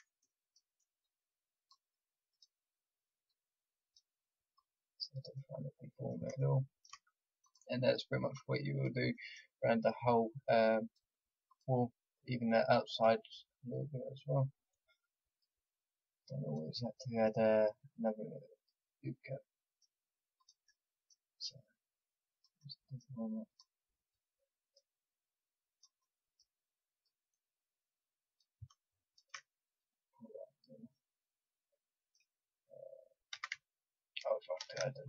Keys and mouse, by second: 5.9 click, 7.4-18.5 drag, 20.3-33.3 drag, 33.3 a, 34.5 ctrl+r.